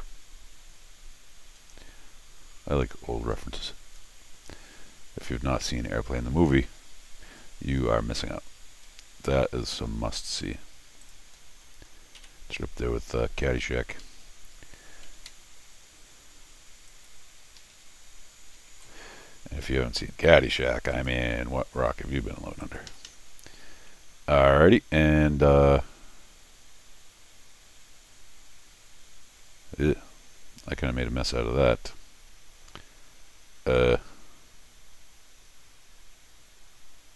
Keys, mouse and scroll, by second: 0.1-0.6 scroll down 4, 1.4 scroll up 2, 1.6-2.2 scroll down 4, 2.7 scroll up 2, 3.3 scroll up 2, 3.9 scroll up 1, 4.9-5.5 scroll down 2, 6.5 scroll up 2, 7.2 scroll down 2, 7.3 middle click, 8.9 middle click, 11.0 click, 11.4-12.2 scroll down 3, 12.2 c, 12.6 scroll up 1, 12.9 middle click, 13.5 middle click, 14.0 Escape, 14.1 Escape, 15.1 alt+l, 16.9 click, 17.6 Escape, 18.7 alt+l, 20.9 click, 22.6 click, 22.9 Escape, 23.1 Escape, 23.2 middle click, 23.6 scroll up 2.